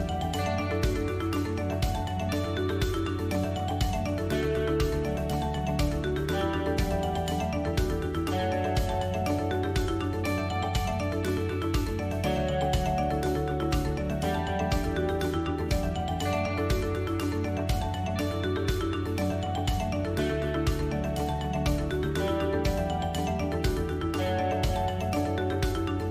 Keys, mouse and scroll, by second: 0.3 middle click, 0.3 click, 0.3 scroll down 1, 0.9 Tab, 1.3 middle click, 1.9 click, 2.3 shift+click, 2.7 click, 4.2-4.5 scroll up 3, 4.5 shift+middle click, 5.5 alt+e, 7.0 e, 11.7 middle click, 14.2 click, 15.8 shift+click, 16.0 shift+click, 17.1 e, 23.6 middle click, 24.4 ctrl+z, 24.4 click, 24.6 shift+click, 24.8 shift+click, 25.5 e.